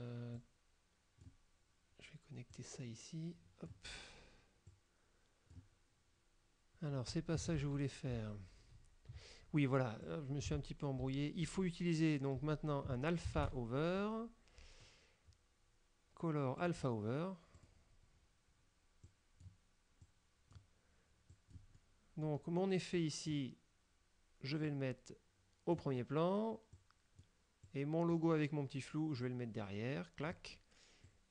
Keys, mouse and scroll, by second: 0.5-1.5 drag, 2.6-4.0 drag, 4.8-5.8 drag, 7.7 ctrl+z, 10.1 click, 10.6 ctrl+z, 12.5 ctrl+z, 13.5 ctrl+shift+a, 16.7 click, 17.7 click, 19.2 click, 20.1 click, 21.4 click, 23.0 click, 24.7-26.0 drag, 26.8 click, 27.8 click, 29.3-30.5 drag, 31.2-31.3 drag.